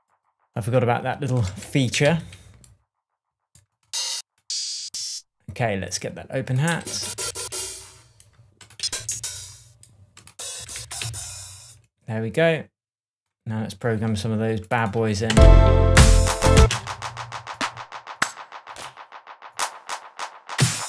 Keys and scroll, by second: 1.4 Left, 1.9 Down, 2.0 Right, 4.8 Up, 6.7 Up, 8.7 Up, 10.5 Down, 15.2 space, 16.5 space.